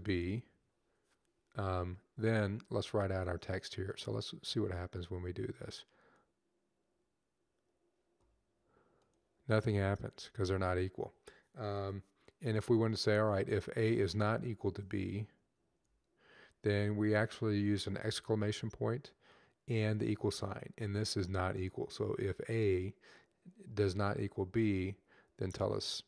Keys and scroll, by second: 0.0 b, 16.5 shift+1.